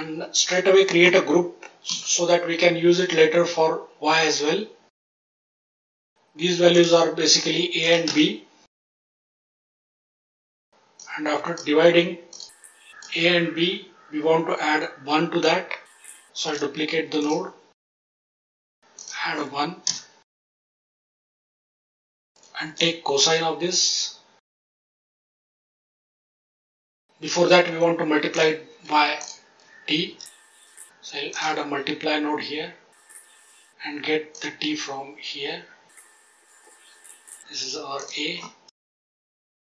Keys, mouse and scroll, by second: 1.8 ctrl+g, 4.1-5.5 scroll up 6, 5.1-5.5 middle drag, 6.7 click, 7.8-8.9 drag, 9.0 click, 9.5-10.0 drag, 10.9-11.5 drag, 12.2 click, 12.6-13.0 drag, 16.0 click, 16.4 shift+d, 17.1 click, 17.8 click, 18.9 click, 21.1-21.5 scroll down 3, 21.5 middle click, 21.8 click, 22.6 shift+a, 25.2-25.8 drag, 28.3 click, 29.1 click, 30.0 shift+d, 30.7 click, 31.2-33.1 drag, 34.3-35.9 drag, 37.0 click, 37.2 click, 37.9 click, 39.5 click.